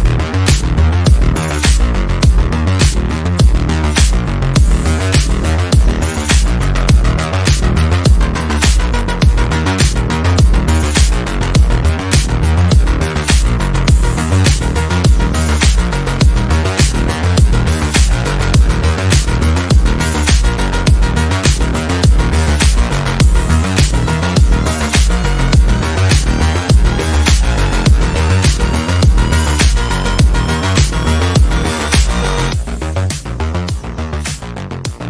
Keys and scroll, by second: 16.6 F3, 16.8 Escape, 17.2 F3, 32.4 F3, 32.5 Escape.